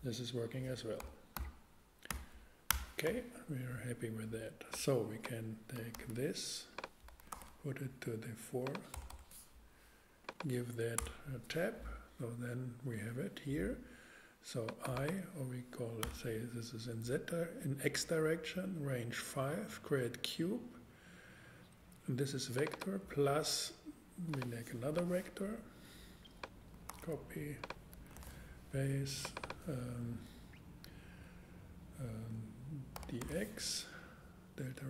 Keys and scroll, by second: 1.0 a, 2.1 x, 2.7 Return, 5.9 super+x, 7.2 super+Return, 7.3 super+v, 8.9 BackSpace, 11.0 Tab, 16.0 x, 26.9 super+c, 27.9 super+Return, 28.1 super+v, 32.9 d, 33.2 x.